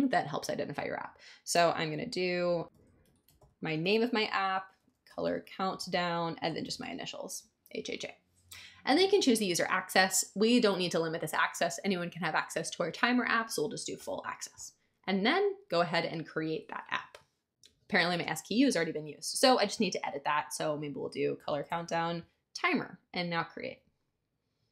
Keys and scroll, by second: 2.4-7.2 typing, 21.1-22.3 typing.